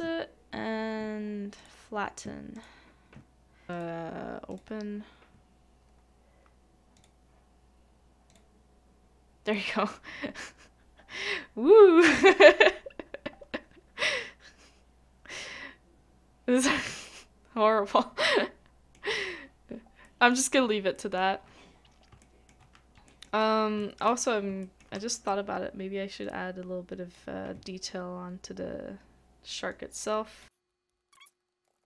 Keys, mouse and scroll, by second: 9.5 shift+middle click, 15.4-19.0 scroll down 1, 20.0 scroll down 1, 20.0 middle click, 20.5-20.9 scroll up 1, 20.9 middle click, 21.4 scroll down 1, 21.8 scroll up 1, 22.2 shift+middle click, 22.6 shift+scroll up 1, 22.6 scroll down 1, 23.1 middle click, 23.8 shift+middle click, 24.2 scroll up 1, 24.6 shift+middle click, 31.3 middle click, 31.7 ctrl+x, 31.7 ctrl+x.